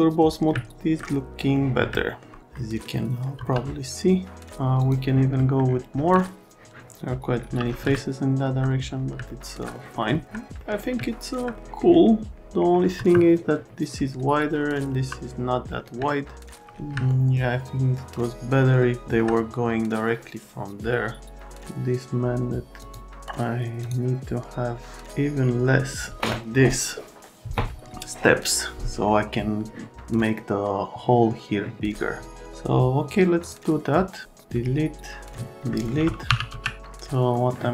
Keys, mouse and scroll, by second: 0.5 alt+right click, 1.5 right click, 1.9 alt+middle click, 2.5 middle click, 3.3 F3, 4.8 click, 5.4 middle click, 6.2 alt+middle click, 7.9 alt+middle click, 9.3 alt+middle click, 9.7 middle click, 10.6 middle click, 11.0 alt+middle click, 12.9 F3, 14.9 F3, 16.0 alt+middle click, 17.1 alt+middle click, 22.8 middle click, 23.8 middle click, 33.4 middle click, 35.6 middle click, 36.2 t, 36.5 z, 37.3 middle click.